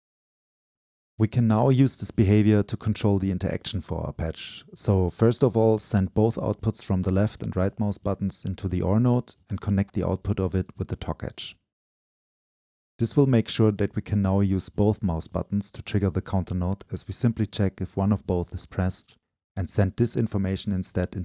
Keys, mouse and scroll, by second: 2.5-3.2 right drag, 3.2 click, 4.0 Delete, 4.4-4.8 right drag, 4.8-6.7 scroll up 2, 6.7-7.1 scroll up 1, 7.1 click, 7.2 right click, 7.3-9.4 drag, 9.6-14.7 drag, 14.7-15.5 middle drag, 15.5 click, 17.7 click, 18.3-20.4 drag, 20.4-20.7 scroll down 2, 20.7-21.2 drag.